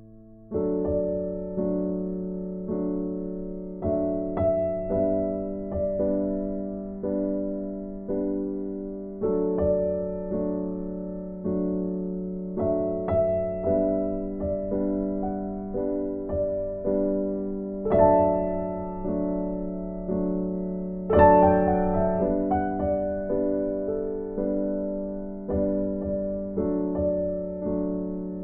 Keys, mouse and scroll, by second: 2.9-3.2 scroll down 1, 5.8 click, 8.0 right click, 10.3 Escape, 11.9 right click, 15.4 right click, 16.7 click, 18.0 right click, 19.3 right click, 28.1 right click.